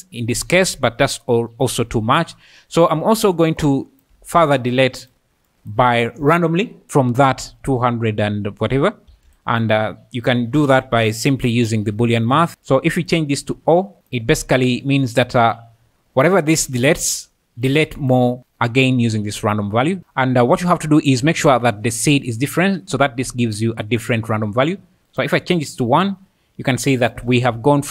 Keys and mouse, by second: 4.2 shift+d, 4.9 click, 5.5 click, 9.2 shift+a, 13.5 click, 15.1 click, 17.7 click, 25.1 click.